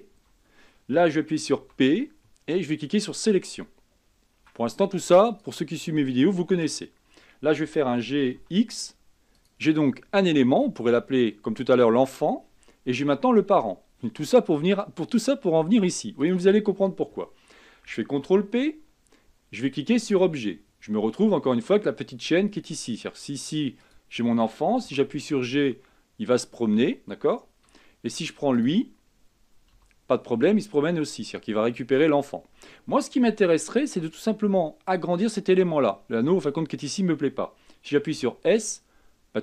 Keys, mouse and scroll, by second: 0.0-0.4 typing, 1.9 p, 4.7 Tab, 5.5 click, 7.9 g, 10.9-11.3 scroll down 3, 11.3-12.7 scroll up 2, 12.7-14.4 scroll up 1, 16.5 shift+click, 18.4 ctrl+p, 21.1-21.8 scroll up 4, 21.8-23.4 scroll down 3, 23.4-24.0 scroll down 3, 24.0 click, 25.1 g, 28.8 click, 30.0 g, 33.7-34.6 shift+middle drag, 34.6-37.7 scroll up 2, 38.4 s.